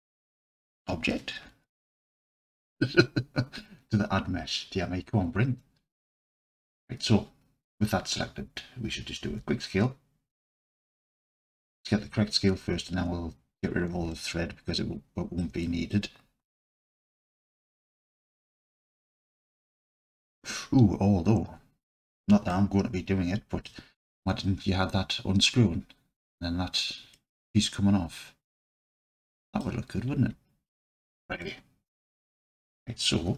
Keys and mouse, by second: 1.7 shift+a, 9.3 s, 11.4 click, 14.2-15.4 alt+middle drag, 15.7-16.0 middle drag, 16.7 s, 19.9 click, 22.6-23.6 alt+drag, 27.2-29.6 alt+drag, 31.4-31.9 alt+drag.